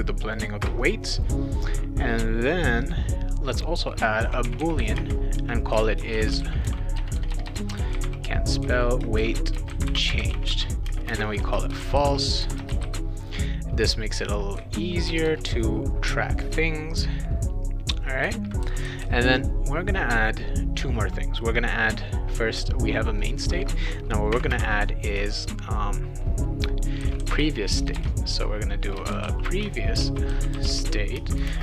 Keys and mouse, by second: 0.3 click, 0.6 Return, 2.9 click, 4.0-13.3 typing, 15.1 BackSpace, 23.2 click, 24.3 ,, 24.5 space, 26.7-31.6 typing.